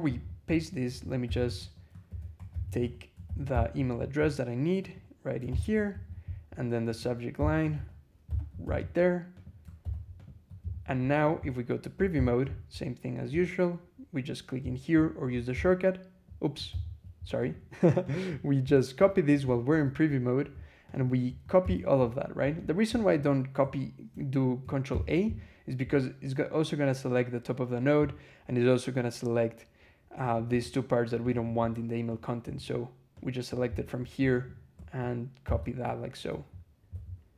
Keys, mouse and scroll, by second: 0.7 Escape, 1.1 g, 1.4 Escape, 1.9 ctrl+e, 2.2 ctrl+Escape, 2.4 ctrl+g, 2.6 ctrl+Escape, 3.1 ctrl+shift+v, 5.8 ctrl+l, 6.7 click, 7.2 v, 7.6 shift+4, 8.1 shift+y, 10.5 ctrl+l, 11.0 ctrl+click, 12.0 ctrl+e, 15.4 ctrl+w, 15.4 ctrl+e, 16.5 alt+h, 17.3 click, 17.9 click, 18.5 scroll down 2, 19.0 scroll up 2, 19.6-20.0 scroll down 2, 20.7 shift+click, 21.5 ctrl+c, 21.9-22.8 ctrl+scroll up 5, 22.9 click, 24.8 ctrl+a, 30.1 click, 30.5-31.1 drag, 31.2 click, 32.0-32.5 drag, 33.0-33.6 drag, 33.8 scroll down 1, 34.2 shift+click, 35.3 ctrl+c, 36.8 ctrl+e.